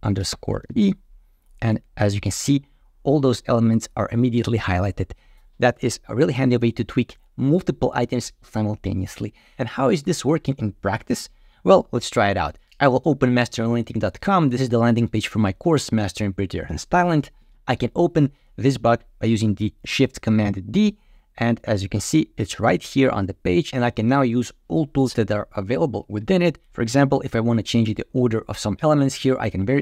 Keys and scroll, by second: 20.4 alt+shift+d.